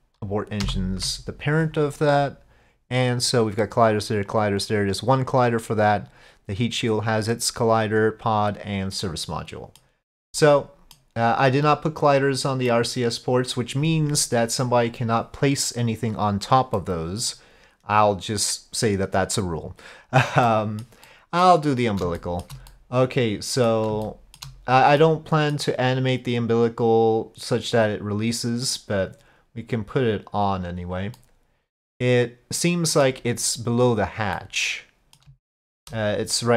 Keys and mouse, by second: 0.7 ctrl+p, 3.2 click, 3.9 click, 4.3 click, 6.0 click, 8.4 click, 9.0-9.8 middle drag, 10.4-11.4 middle drag, 12.7-13.6 middle drag, 16.8-17.3 middle drag, 20.5-20.9 middle drag, 21.1-21.5 middle drag, 22.2 shift+middle drag, 22.7-23.7 middle drag, 24.1-24.4 shift+middle drag, 25.0-25.6 middle drag, 31.2-33.1 middle drag, 34.4-35.2 middle drag, 35.5-35.8 shift+middle drag.